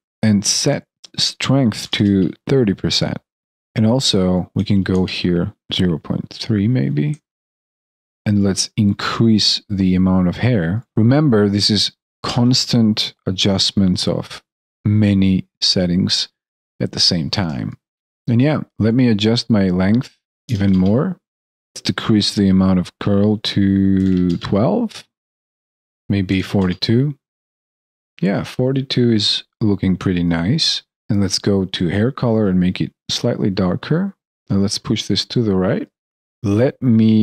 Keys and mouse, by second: 7.8 alt+middle click, 17.9 alt+middle click, 25.8 alt+right click, 26.2 ctrl+a, 28.4 alt+click, 29.0 alt+middle click.